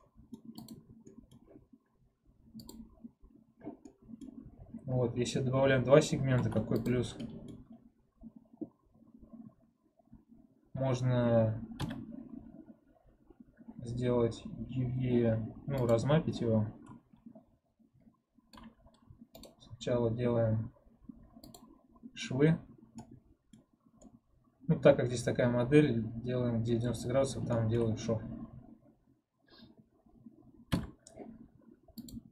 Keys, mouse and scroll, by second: 0.5 click, 1.0-2.5 middle drag, 2.5-3.8 drag, 3.8-6.3 middle drag, 6.3 ctrl+Tab, 7.1 middle click, 7.9-10.0 scroll up 1, 11.7 u, 15.8 click, 16.6-21.2 scroll up 9, 21.4-22.8 right drag, 22.8 middle click, 23.5-23.9 scroll up 1, 23.9-26.9 middle drag, 26.9-27.4 scroll up 1, 27.4 shift+middle click, 27.8-32.0 scroll down 1, 32.0 u.